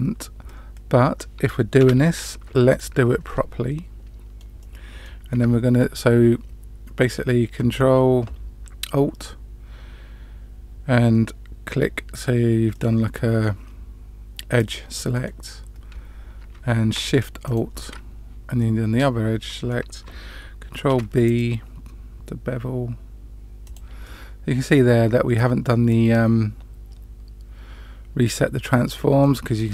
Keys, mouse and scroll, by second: 1.8 2, 2.6 alt+click, 3.2-4.4 middle drag, 4.6 middle click, 5.9-7.0 middle drag, 12.7 middle click, 14.6 middle click, 17.4 alt+shift+click, 18.5-19.7 middle drag, 20.8 ctrl+b, 24.0-29.2 middle drag.